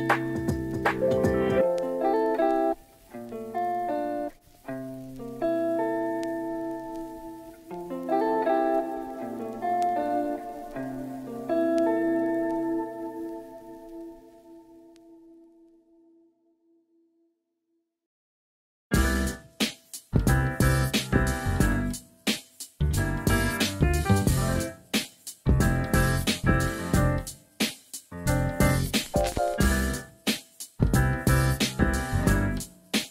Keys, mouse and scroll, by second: 0.5 shift+middle click, 1.6 alt+z, 2.2 Tab, 2.7-4.0 middle drag, 4.4 KP_7, 5.1 shift+middle click, 5.4 click, 5.6 Tab, 6.6 click, 7.6 click, 8.1 click, 11.1 ctrl+z, 11.7 click, 12.0 click, 12.5 alt+z, 13.1 click, 15.6 click, 19.2 click, 20.1 click, 21.8 click, 22.5 ctrl+z, 23.8 shift+middle click, 25.0 click, 25.2 middle click, 26.2 alt+z, 26.5-28.3 middle drag, 28.7 KP_7, 29.3 shift+middle click, 29.6 alt+z, 30.5 click, 32.2 click, 32.8-33.1 middle drag.